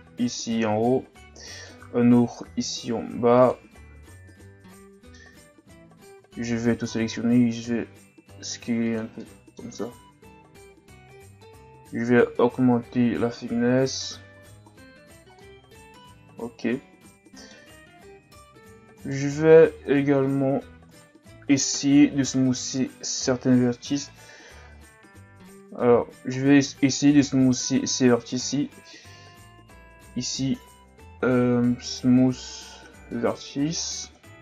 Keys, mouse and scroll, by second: 0.8 ctrl+r, 4.1 Tab, 4.7 middle click, 5.5 Tab, 6.0 a, 6.2 a, 6.9 s, 9.2 middle click, 10.0 Tab, 11.8 click, 14.3 a, 14.7-15.4 scroll down 1, 15.4-17.7 middle drag, 17.7-18.0 scroll up 2, 18.0 Tab, 18.7 Tab, 19.0 right click, 19.3 Tab, 20.9 right click, 21.7 ctrl+KP_Add, 22.2 ctrl+KP_Add, 22.5 ctrl+KP_Add, 24.0 KP_3, 24.7-25.0 ctrl+scroll down 3, 25.0-25.6 shift+scroll up 7, 25.8 z, 26.3-26.8 ctrl+scroll down 1, 27.1 right click, 27.4 b, 29.9 w, 34.2 z.